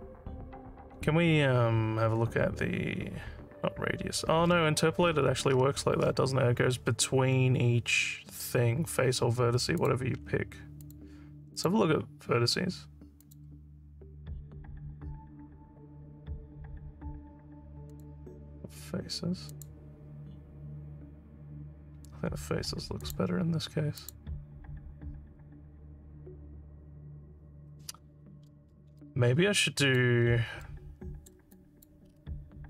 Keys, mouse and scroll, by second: 1.1 scroll up 1, 5.1-6.1 scroll up 8, 9.8 click, 10.2 scroll down 1, 10.8 click, 11.6 click, 13.3 click, 17.9 click, 19.5 click, 23.0 click, 24.0 click, 29.1 alt+click, 30.2 scroll down 1, 30.7 alt+middle click, 31.6 alt+click, 32.1 scroll down 3.